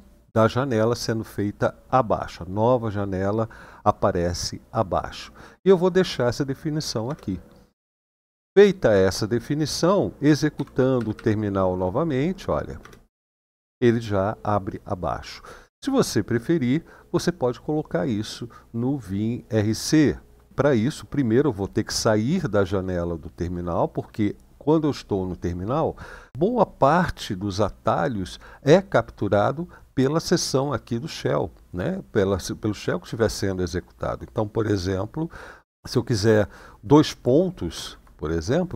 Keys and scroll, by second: 6.8 Return, 10.3-10.7 typing, 10.7 Up, 10.9 Up, 12.5 Return, 37.5 shift+;.